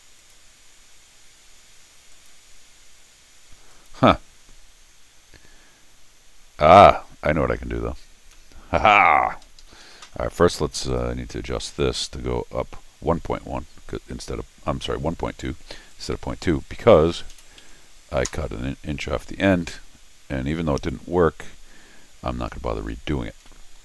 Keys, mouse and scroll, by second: 0.2 click, 2.1 click, 3.7 click, 7.8-8.3 scroll down 2, 8.3 middle click, 9.4 Escape, 9.6 Escape, 10.9 click, 11.8 click, 15.9 click, 17.6 1, 18.3 Return, 20.8 click, 22.9 scroll down 2, 23.3 scroll up 2, 23.5 middle click.